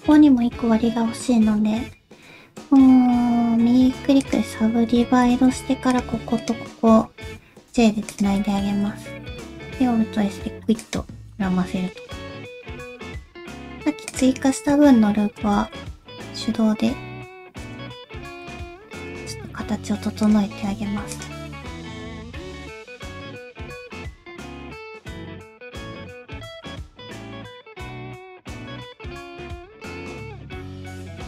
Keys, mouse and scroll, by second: 2.6 right click, 4.9 1, 5.4 alt+z, 5.9 click, 6.4 shift+click, 7.6 j, 8.1 click, 8.4 alt+z, 8.6 middle click, 9.2 alt+s, 11.3 middle click, 12.1 middle click, 13.0 middle click, 13.0 scroll down 3, 13.3 alt+z, 14.1 alt+click, 15.5 alt+z, 16.2 g, 17.9-18.3 scroll down 1, 18.3 middle click, 19.0 click, 19.2 g, 20.7 g, 21.7 click, 21.9 g, 22.2 middle click, 22.7 shift+middle click, 23.0 click, 23.1 g, 23.5 click, 23.6 g, 24.0 middle click, 24.5 click, 24.7 shift+middle click, 24.9 shift+click, 25.9 g, 27.3 middle click, 27.6 click, 27.7 g, 28.0 middle click, 30.3 middle click, 30.5 g, 30.8 middle click, 31.1 click.